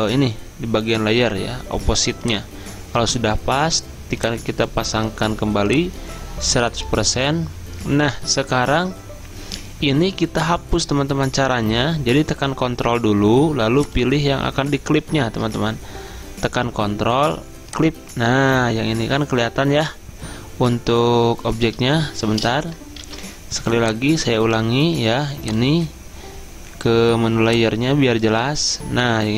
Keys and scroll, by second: 15.4 Return, 21.9 Escape, 23.1 ctrl+d.